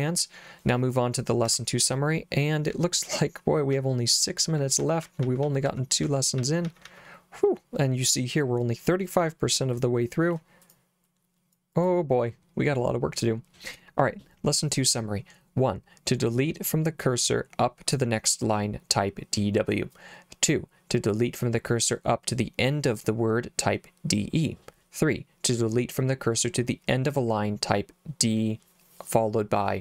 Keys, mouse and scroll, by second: 1.4 Escape, 2.7 j, 3.7 j, 4.8-7.8 typing, 9.7 click, 10.6 click, 11.0 click, 11.7 click.